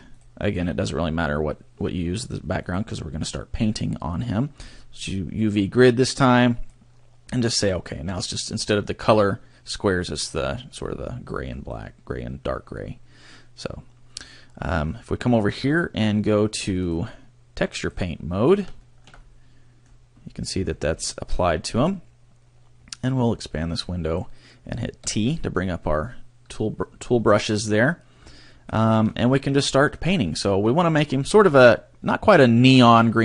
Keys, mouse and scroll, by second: 8.5 scroll up 2, 10.8 scroll up 3, 11.5 scroll down 2, 16.8 click, 18.1 click, 18.7 shift+middle click, 19.1 middle click, 20.6 scroll up 4, 21.0 middle click, 23.2 click, 25.0 t, 28.5 shift+middle click, 29.1 middle click, 32.9 click.